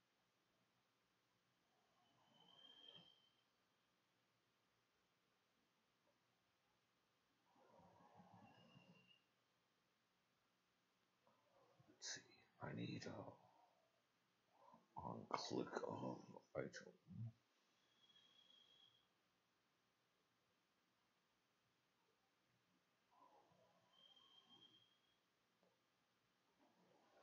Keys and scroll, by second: 3.4 -, 3.5 Delete, 3.9 BackSpace, 4.7 BackSpace.